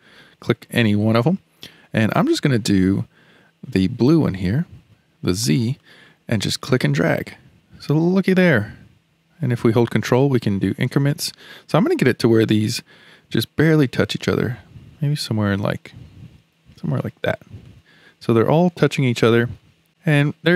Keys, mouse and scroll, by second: 5.8 click, 17.6-19.9 middle drag, 19.9-20.3 scroll up 1, 20.3-20.5 middle drag.